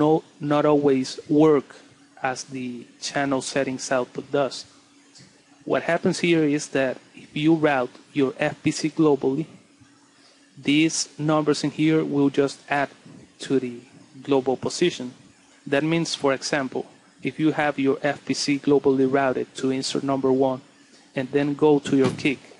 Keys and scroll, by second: 3.0 Escape, 3.2 Page_Up.